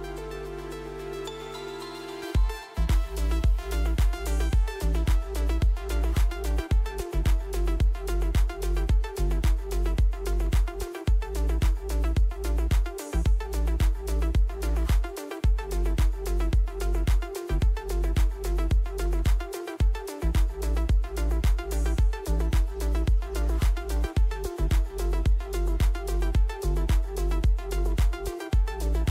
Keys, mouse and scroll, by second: 0.2 right click, 1.9 click, 3.3 right click, 4.8 click, 6.2 click, 7.8 click, 17.6 Escape, 18.4 click, 20.7 click, 24.4 click.